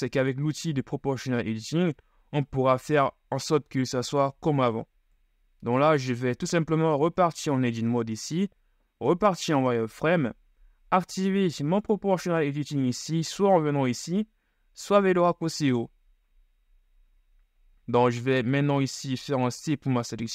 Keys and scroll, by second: 7.1 Tab, 8.1 ctrl+shift+Tab, 9.3 z, 19.4 c.